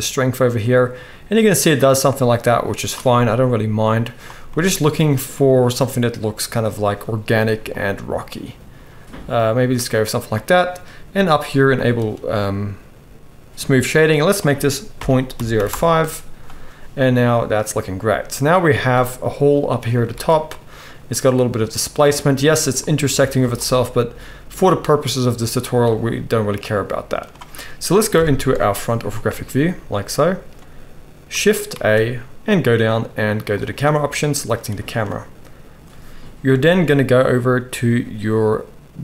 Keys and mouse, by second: 11.9-14.0 right drag, 14.0-24.2 middle drag, 20.1 alt+a, 20.6-21.9 drag, 20.6-21.9 right drag, 23.1-23.6 drag, 23.1-25.6 right drag, 24.4-25.0 middle drag, 25.6-26.1 middle drag, 26.1-27.0 right drag, 27.0-29.3 middle drag, 28.1 KP_1, 29.3-39.0 shift+right drag, 31.7 shift+a.